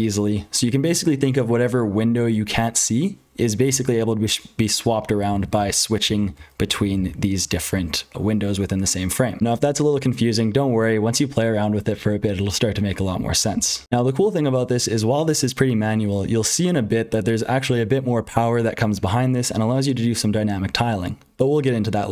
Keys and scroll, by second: 3.7 super+h, 5.3 ctrl+z, 5.5-22.1 typing, 6.0 ctrl+z, 6.7 ctrl+z, 7.4 ctrl+z, 9.4 F12, 13.5 ctrl+c, 13.8 ctrl+d, 13.8 F12.